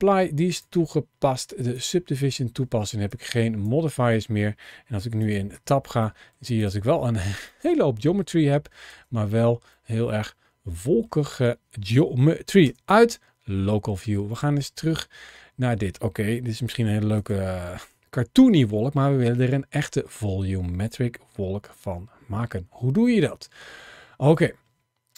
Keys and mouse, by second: 0.3-1.8 drag, 5.1 click, 5.5 Tab, 6.0 middle click, 7.4-8.6 middle drag, 8.8 Tab, 9.1 middle click, 10.1 middle click, 14.3-15.8 middle drag, 16.4 g, 17.0 click, 17.6-18.8 middle drag.